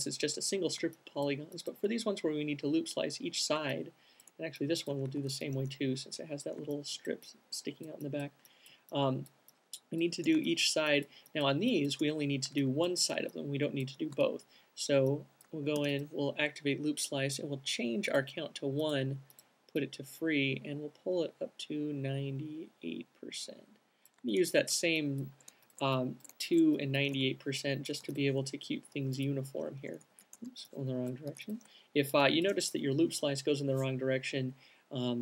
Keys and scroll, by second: 5.5 alt+c, 13.7 alt+q, 16.1 c, 26.1 alt+shift+q, 28.4 c, 30.4 super+z, 30.6 alt+shift+q.